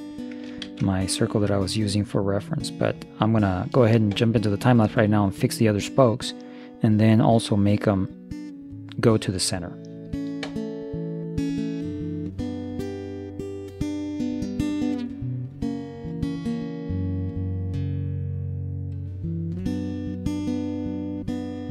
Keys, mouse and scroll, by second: 0.8 ctrl+s, 13.8 right click, 14.0 middle click, 14.2 shift+d, 14.8 p, 14.8 Tab, 14.9 right click, 15.2 h, 15.8 ctrl+j, 15.8 middle click, 16.0 Tab, 16.4 ctrl+KP_3, 17.0 z, 17.2 a, 17.3 a, 17.4 c, 18.2 click, 18.8-20.6 typing, 19.3 click, 20.4 ctrl+l, 20.9 ctrl+KP_3, 21.1-21.7 middle drag.